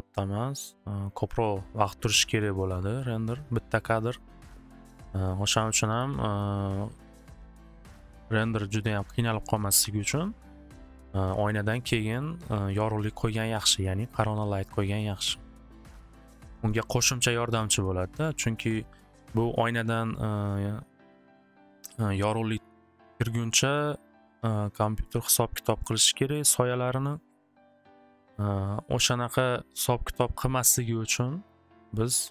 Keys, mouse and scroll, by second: 5.0 middle click, 6.5 click, 7.2-8.1 typing, 7.3 click, 7.4 click, 12.2 click, 13.6 click, 15.0 click, 19.2 click, 23.0-24.2 drag, 25.0 click, 25.8 click, 26.2 alt+w, 26.6 alt+w, 28.2 middle click, 29.4 click, 32.2 click.